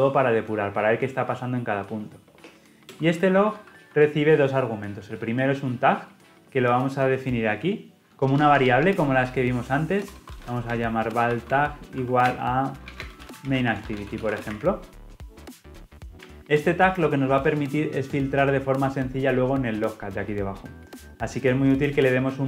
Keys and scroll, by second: 3.0 Return, 5.4 ctrl+p.